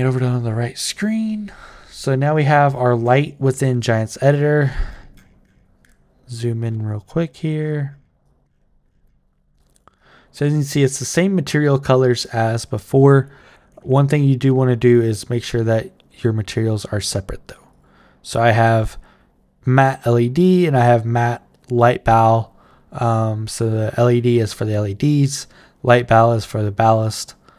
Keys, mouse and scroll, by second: 0.6 click, 1.8-3.1 right drag, 8.0-9.6 right drag, 9.8-12.0 right drag, 15.2 click, 16.5 click, 17.5 click.